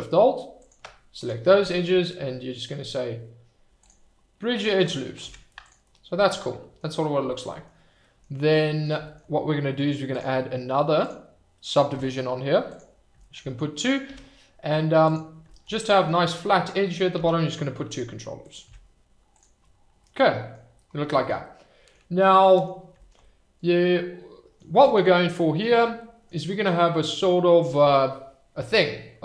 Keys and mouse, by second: 1.3-3.9 right drag, 5.2 Tab, 7.3 shift+middle drag, 7.5 middle click, 8.0 middle click, 8.7 middle drag, 10.1-11.3 drag, 12.7 click, 14.0 Tab, 15.6 shift+middle click, 15.8 middle click, 17.1 ctrl+r, 18.6 Tab, 20.0-20.5 middle drag, 21.4-21.9 middle drag, 22.4 middle drag, 23.2-24.6 middle drag, 26.0 middle drag.